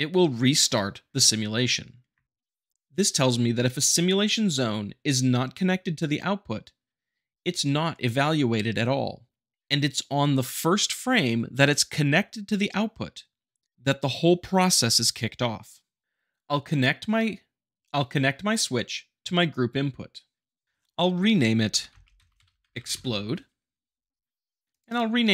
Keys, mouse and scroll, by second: 2.1 space, 19.5-20.5 drag, 20.6 click, 21.3-22.7 typing, 22.9 Return, 24.7-25.3 drag.